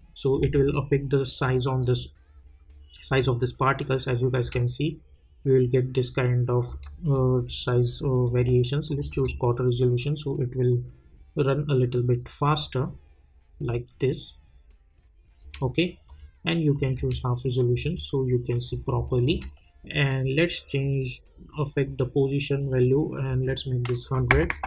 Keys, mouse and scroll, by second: 4.4 Return, 5.0 space, 7.1 click, 9.1 space, 15.4 space, 16.1 click, 16.9 space, 19.2 space, 20.8-23.4 drag.